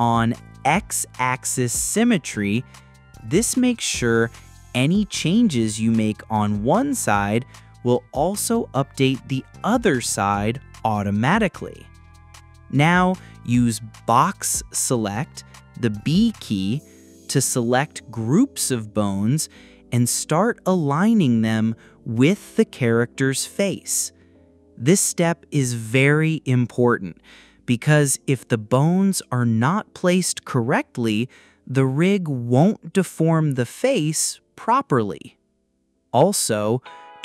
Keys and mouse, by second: 1.0 click, 3.2 g, 7.6 ctrl+click, 8.6 click, 10.2 click, 11.8 g, 19.2 ctrl+click, 21.1 click, 24.4-25.1 drag, 25.9 g, 28.9 ctrl+click, 29.6-29.9 drag, 30.7 g, 33.5 ctrl+click, 35.4 click.